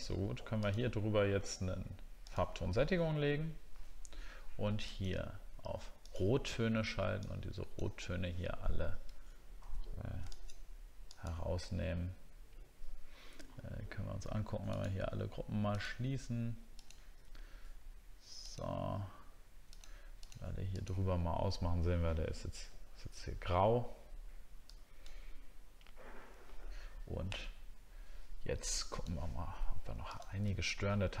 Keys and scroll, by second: 30.5 alt+scroll up 1.